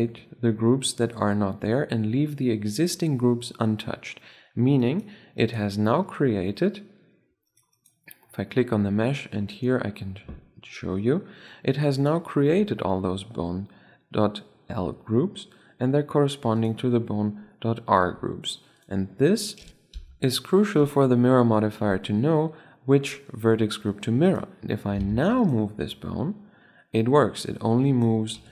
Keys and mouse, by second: 4.5 right click, 5.8-6.9 drag, 7.2-9.2 right drag, 9.2-10.9 drag, 11.7-13.7 drag, 13.7-15.0 middle drag, 15.0-16.3 middle drag, 16.3-18.2 drag, 18.5-19.8 drag, 20.7-22.6 drag, 24.2-27.1 right drag, 25.0 ctrl+Tab, 26.0 r, 28.3 ,.